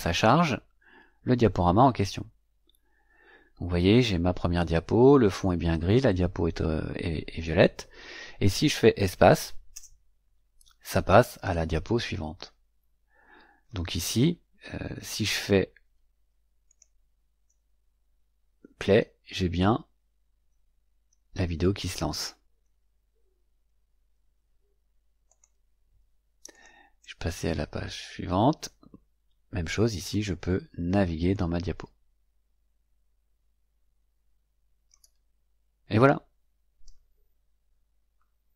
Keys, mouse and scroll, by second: 9.6 space, 16.6 click, 25.2 click, 26.4 click, 26.9 space, 31.2-35.0 drag, 36.6 click.